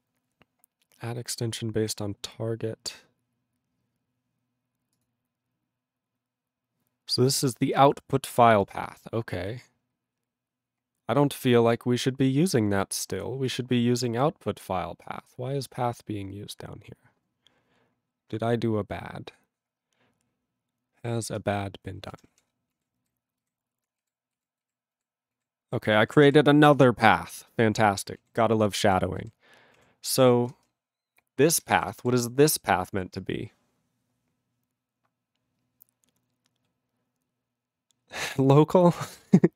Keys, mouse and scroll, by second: 3.3 scroll down 2, 4.9 click, 5.0 click, 7.3 click, 8.2 click, 8.2-8.5 scroll down 2, 8.6 click, 8.7 click, 9.7 click, 9.7-10.4 scroll down 4, 10.4-11.1 scroll down 7, 11.6-12.0 scroll down 7, 12.0-12.7 scroll up 15, 12.7-13.5 scroll up 7, 13.5 click, 13.6 click, 14.7 click, 14.7-17.7 scroll down 27, 17.7-18.7 scroll down 4, 18.7-19.8 scroll down 8, 19.8 scroll, 19.9-20.5 scroll down 3, 20.5 scroll, 20.6-21.3 scroll down 1, 21.3 click, 21.4 click, 22.1-23.9 typing, 24.1 ctrl+s, 24.3 ctrl+s, 25.0 ctrl+s, 25.3 ctrl+s, 25.6 ctrl+r, 25.9 ctrl+r, 26.1 ctrl+r, 26.2 ctrl+r, 26.7 Return, 28.2 ctrl+a, 28.7 ctrl+space, 28.8 ctrl+e, 29.2 ctrl+g, 30.3 ctrl+a, 30.5 ctrl+space, 30.6 ctrl+e, 31.5 ctrl+g, 31.9 alt+b, 32.0 alt+b.